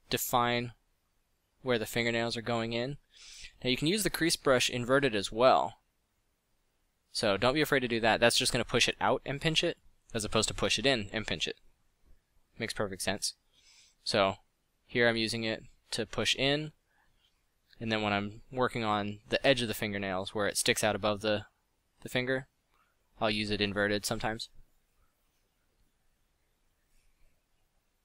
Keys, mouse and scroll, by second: 2.6 f, 14.3 f, 21.7 f, 22.7 f.